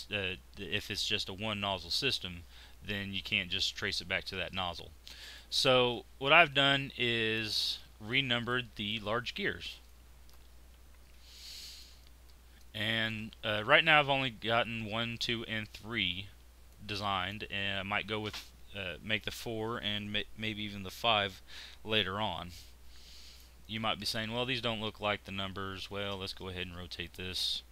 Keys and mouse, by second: 5.6 click, 6.5-9.8 middle drag, 12.0-16.7 middle drag, 24.1 middle click, 25.9 shift+r.